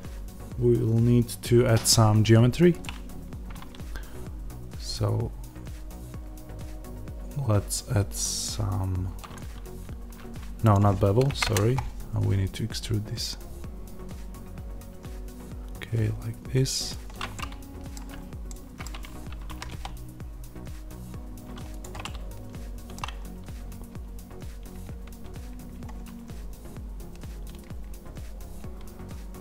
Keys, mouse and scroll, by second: 17.3-21.7 middle drag, 18.0 scroll down 1, 18.2 scroll down 1, 18.8-19.5 scroll, 19.5 g, 21.7 click, 21.9-29.4 middle drag, 23.6 Tab, 29.0-29.4 scroll down 2.